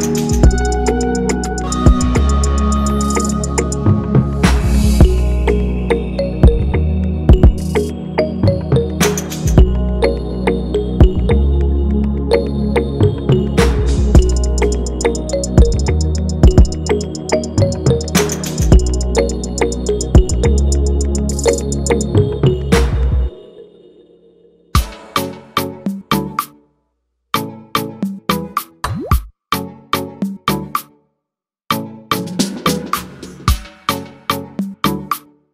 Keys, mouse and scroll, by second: 4.7 click, 6.0 click, 6.3 scroll down 1, 6.7-7.1 scroll up 3, 7.5-8.6 drag, 8.9 scroll up 3, 9.5 click, 9.9-11.7 right drag, 11.7 click, 12.5-13.9 drag, 14.5 click, 14.9 scroll up 2, 16.0-18.6 drag, 18.7 scroll down 2, 20.4 click, 21.0 click, 22.5 click, 24.1 click, 25.3 click, 25.7-26.7 scroll up 2, 28.3-28.9 scroll down 1, 29.2 click, 30.6 click, 31.4 scroll down 2, 32.4-35.4 drag.